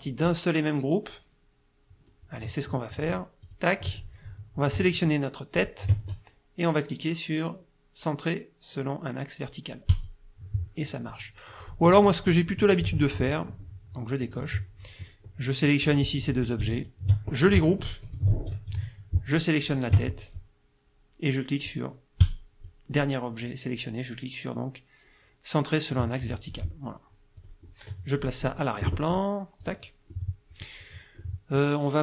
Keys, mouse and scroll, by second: 3.5 click, 5.6 shift+click, 9.9 click, 11.7 click, 12.3 ctrl+z, 14.3 click, 15.9 click, 16.8 shift+click, 18.2 ctrl+g, 19.3 shift+click, 22.2 click, 26.5 click, 27.4 click, 29.6 click, 30.1 middle click, 31.2 middle click.